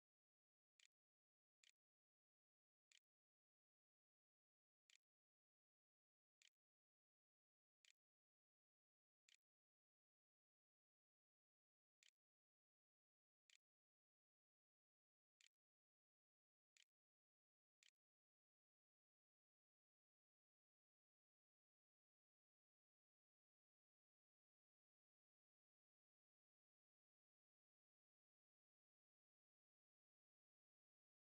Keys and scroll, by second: 0.0-13.3 typing, 14.1 Delete, 14.5-16.5 typing, 14.6 Return, 17.3 ctrl+a, 17.4 ctrl+s, 18.5 z.